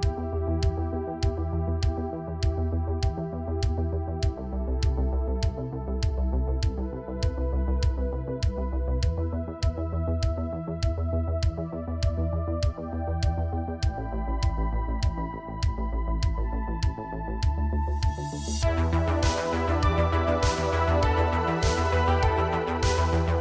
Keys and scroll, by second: 0.2 Tab, 2.0 g, 6.7 g, 12.9 g, 13.5 Tab, 15.2 Tab, 16.7 g, 19.3 g, 21.6 Tab, 22.9 Tab, 23.1 Tab.